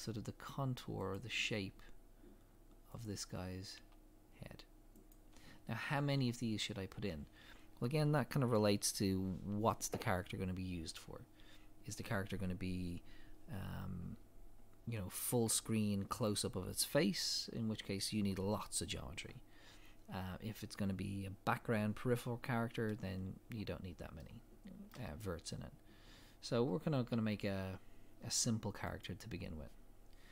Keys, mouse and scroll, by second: 3.2-3.8 scroll down 1, 23.5 scroll up 1, 24.2 shift+middle click, 26.8 scroll down 1, 27.6 scroll up 1, 29.0 click.